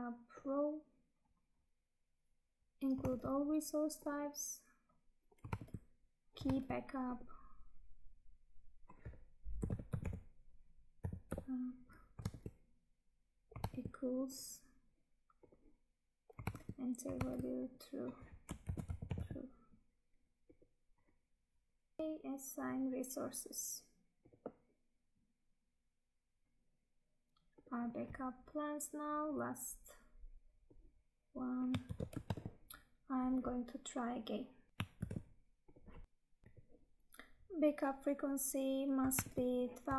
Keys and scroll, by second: 2.5 Tab, 3.1 Tab, 5.7 Tab, 12.4 Tab, 13.8 Tab, 16.6 Tab, 22.0 Tab, 26.4 Tab, 31.7 ctrl+c, 32.4 Tab, 34.9 ctrl+v, 39.3 Tab.